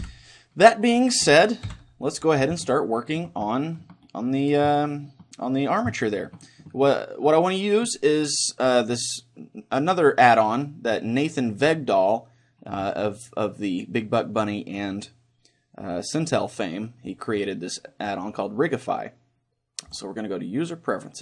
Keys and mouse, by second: 0.0 Escape, 1.0-2.7 right drag, 1.7 KP_1, 2.7-9.2 middle drag, 12.0-18.3 drag.